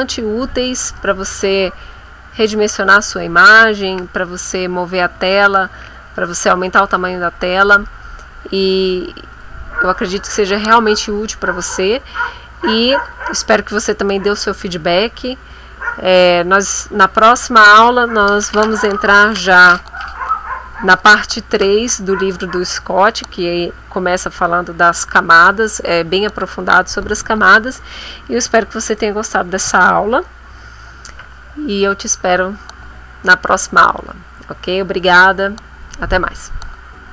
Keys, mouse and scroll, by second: 0.9 ctrl+z, 2.3 ctrl+z, 3.8 ctrl+z, 5.7 ctrl+shift+a, 9.3 click.